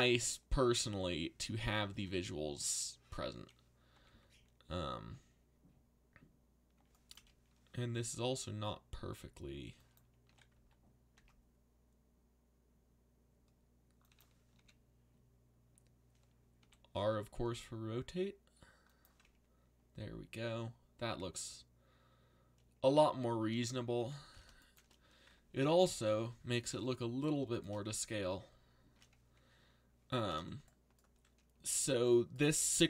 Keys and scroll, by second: 1.4 z, 3.9 z, 8.2 r, 10.2 g, 10.5 x, 11.1 y, 14.5 l, 16.6 r, 24.0 z, 25.8 z.